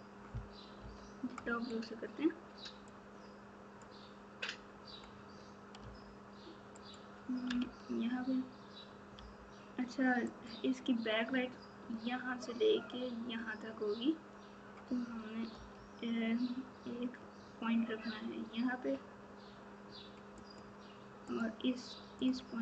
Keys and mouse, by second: 0.7 KP_7, 2.8 click, 3.2 click, 7.5 alt+z, 9.1 g, 21.2 click.